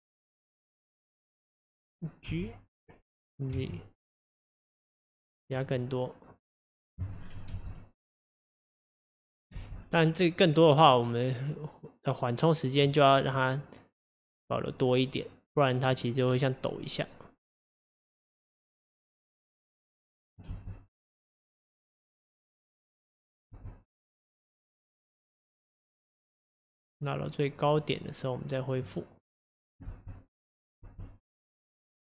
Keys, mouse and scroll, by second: 2.3 g, 6.3-7.5 drag, 7.2-7.5 scroll down 3, 7.5 space, 9.6 space, 9.8 scroll up 3, 10.9-18.8 drag, 20.2-20.5 drag, 20.5 space, 23.7-26.7 drag, 27.8 click, 29.3-29.9 drag, 29.9 space, 30.9 space, 31.5-32.1 drag.